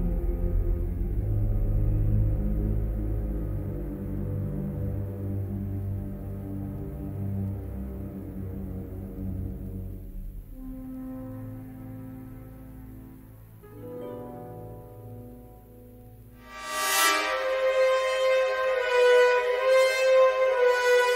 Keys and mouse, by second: 2.1 middle click, 3.1 middle click, 4.1 3, 4.8 g, 12.4 middle click, 12.9 3, 15.8 alt+shift+click, 18.2-20.7 drag.